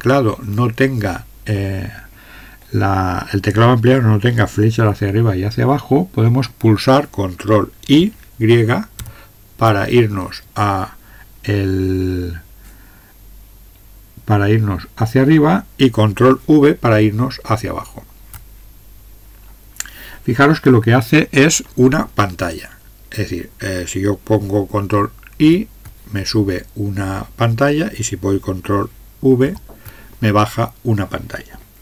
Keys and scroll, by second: 9.0 ctrl+y, 17.0 ctrl+v, 25.4 ctrl+y, 29.4 ctrl+v.